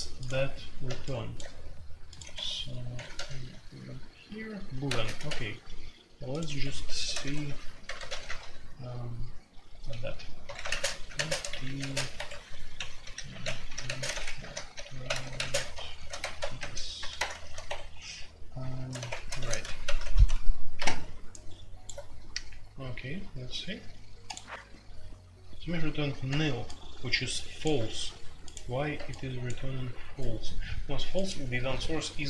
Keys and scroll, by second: 2.3 Escape, 2.9 typing, 4.8-5.2 typing, 6.4-8.2 typing, 10.4-20.5 typing, 19.3 Escape, 19.4 F2.